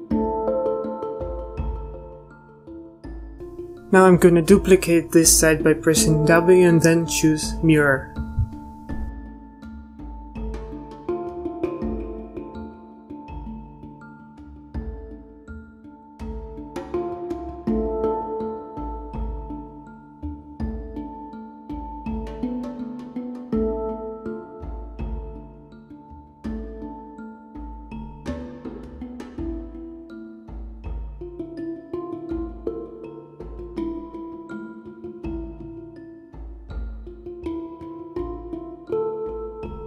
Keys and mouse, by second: 0.0-1.0 typing, 0.1 ctrl+KP_Add, 0.4 ctrl+KP_Add, 1.7 ctrl+z, 2.0 ctrl+z, 2.4 ctrl+z, 2.9 z, 5.2 a, 6.5 w, 10.4 z, 10.8 c, 12.7 z, 18.0 z, 18.5 middle click, 18.7 z, 22.1 z, 22.1 l, 22.3 l, 23.1 z, 24.2 l, 24.4 l, 25.7 a, 26.2 z, 26.3-27.0 a, 27.4 z, 28.5 ctrl+s, 28.7 z, 29.9 click, 30.3 a, 32.1 z, 32.8-33.6 drag, 33.6 z, 34.2 click, 36.4 click, 36.7 z, 36.7 a, 38.1 KP_3.